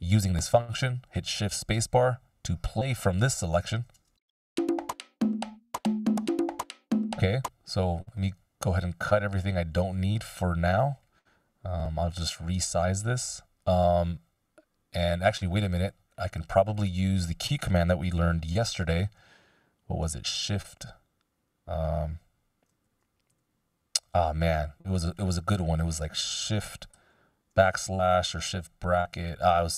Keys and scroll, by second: 4.2 shift+space, 6.1 Delete, 6.8 space, 18.8 \, 20.5 shift+\, 22.8 shift+/, 26.9 shift+\, 28.4 shift+].